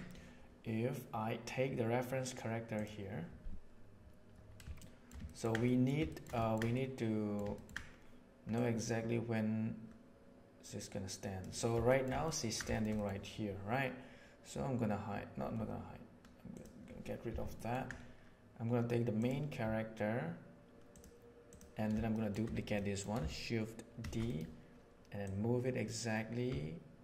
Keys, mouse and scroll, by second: 4.7-5.1 shift+middle drag, 5.2 ctrl+middle click, 5.6-5.9 middle drag, 6.0 shift+middle click, 6.3 ctrl+middle click, 6.7-7.2 middle drag, 7.5 ctrl+middle click, 8.5-11.4 right drag, 11.8 shift+middle drag, 12.2 ctrl+middle click, 13.0 middle click, 17.5 ctrl+middle click, 20.9 click, 22.1 shift+middle click, 22.7 middle click, 23.9 shift+d, 25.2-27.0 middle drag.